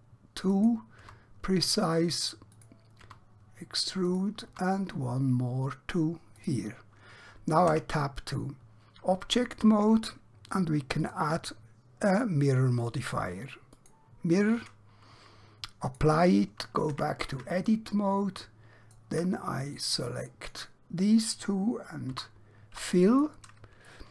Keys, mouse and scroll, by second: 0.6 click, 1.1 e, 2.6 click, 3.1 e, 4.1 click, 4.6 e, 6.5 click, 7.8 Tab, 11.1 click, 17.0 Tab, 17.7 shift+middle click, 19.7 click, 22.2 f, 23.2 click, 23.9 shift+middle click.